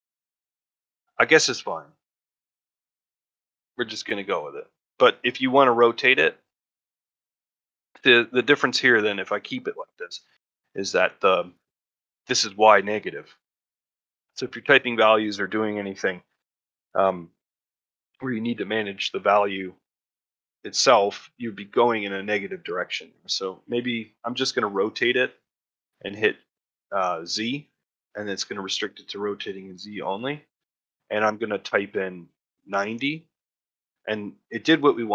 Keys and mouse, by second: 1.7-4.9 middle drag, 6.5-6.8 shift+middle drag, 6.9 middle click, 7.9 middle drag, 8.3 shift+middle drag, 8.6-8.9 middle drag, 10.1-10.6 shift+middle drag, 23.5 middle drag, 24.0 middle drag.